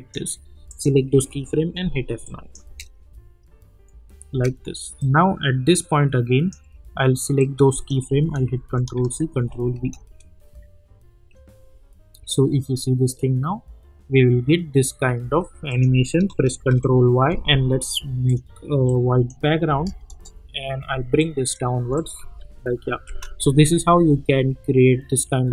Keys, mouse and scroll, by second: 1.1 F9, 2.2 click, 2.6 space, 5.0-6.5 drag, 8.5 ctrl+c, 8.9 ctrl+v, 9.7 space, 15.2 space, 15.7 click, 16.6 ctrl+y, 18.2 click, 19.7 Return, 21.2-21.8 click, 22.4 u, 23.0 space.